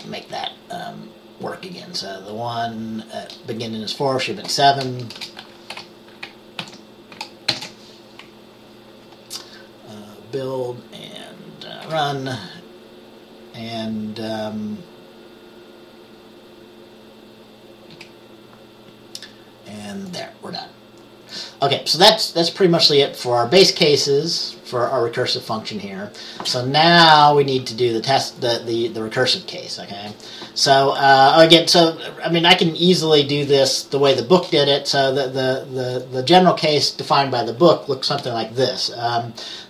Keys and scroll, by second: 5.3 BackSpace, 5.9 7, 6.7 ctrl+s, 7.6 ctrl+b, 12.0 F5, 18.0 F5, 38.3 Return.